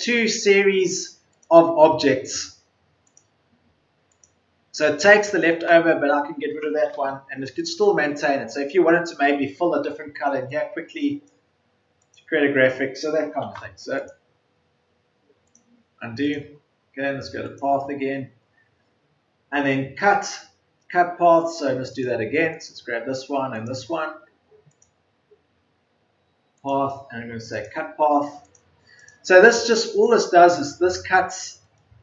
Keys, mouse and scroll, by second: 5.6 Delete.